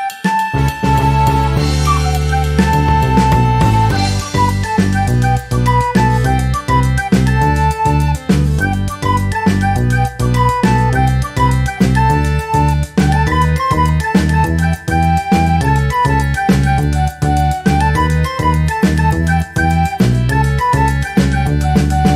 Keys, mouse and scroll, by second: 0.5-1.8 drag, 2.3 click, 3.3 click, 4.8-6.7 drag, 7.2 click, 7.5 click, 8.1-8.6 ctrl+scroll down 4, 8.9 ctrl+click, 9.8 ctrl+click, 10.7-11.8 drag, 12.3 ctrl+shift+click, 13.5-14.9 ctrl+shift+drag, 15.2 ctrl+scroll down 2, 16.1 ctrl+d, 17.7 click, 19.5 shift+click, 21.4 click, 22.0 ctrl+scroll up 2.